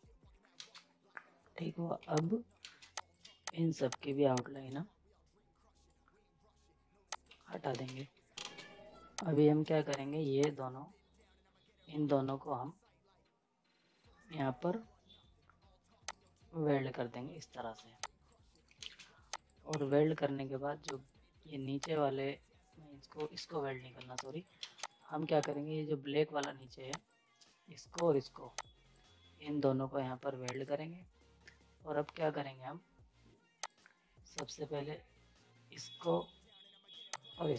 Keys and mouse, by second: 0.6 ctrl+space, 2.0 z, 2.2 click, 2.6 ctrl+space, 2.9 click, 3.5 click, 5.7 right click, 7.1 click, 7.3 z, 7.5 right click, 7.7 space, 8.0 z, 8.3 ctrl+space, 9.2-12.1 drag, 12.1 z, 16.1 click, 17.7 z, 18.0 click, 18.5 right click, 18.8 ctrl+space, 19.3 click, 23.1 ctrl+z, 23.9 z, 24.2 click, 24.6 ctrl+space, 24.9 click, 29.4 ctrl+z, 30.5 click, 33.6 click, 37.1 shift+click.